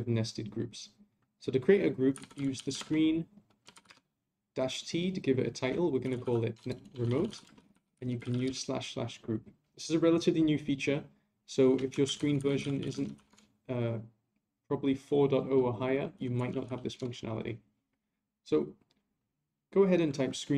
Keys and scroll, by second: 12.0 ctrl+a.